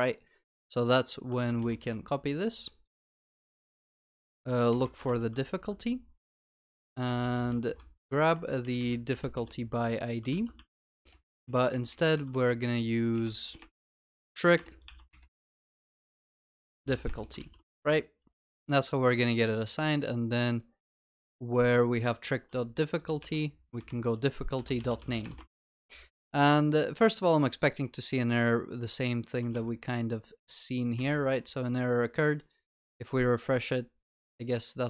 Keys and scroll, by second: 1.4 ctrl+c, 4.9 ctrl+v, 5.4 Return, 5.5 ctrl+s, 10.3 Return, 10.3 ctrl+s, 17.4 ctrl+BackSpace, 17.4 ctrl+s, 23.0 Delete, 25.5 Delete, 26.5 ctrl+s.